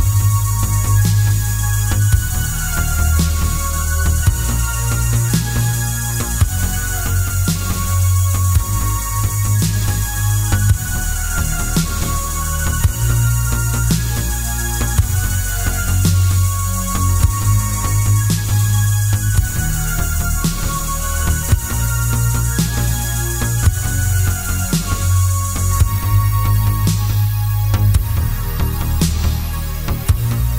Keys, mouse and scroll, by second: 0.4 click, 0.6 s, 2.3 Escape, 3.6-7.0 drag, 7.4-8.4 drag, 8.8 3, 9.3-11.3 drag, 11.3 ctrl+z, 12.0-13.2 middle drag, 13.2 ctrl+click, 13.8 ctrl+z, 14.6 shift+click, 14.9 shift+click, 15.1 shift+click, 15.4-16.5 right drag, 16.5 middle click, 17.6 shift+click, 17.8 shift+click, 18.3-20.3 middle drag, 20.3 shift+click, 20.6 shift+click, 20.9-23.4 middle drag, 23.6 click, 24.0-25.8 right drag, 25.6 Tab, 25.8 click, 26.2-30.5 middle drag, 27.3-27.7 scroll down 1, 29.9 scroll down 1.